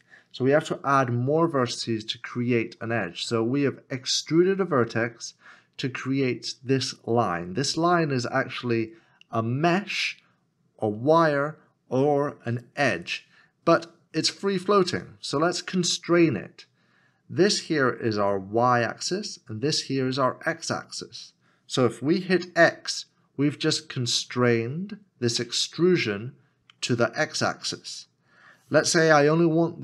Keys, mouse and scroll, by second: 22.6 x.